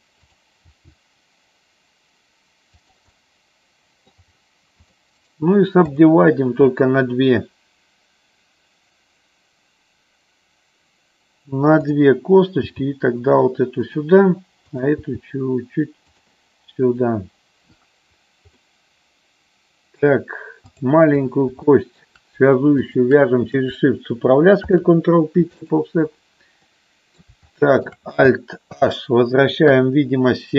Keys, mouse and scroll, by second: 0.2 click, 0.5 click, 0.5 g, 3.1-4.1 middle drag, 5.1 right click, 11.7 click, 12.6 g, 14.6 click, 15.0 g, 18.5-19.9 middle drag, 21.6 shift+middle click, 22.9 shift+click, 24.5 ctrl+p, 26.6 middle click, 27.5 shift+middle click, 28.7 alt+h, 29.6 KP_1.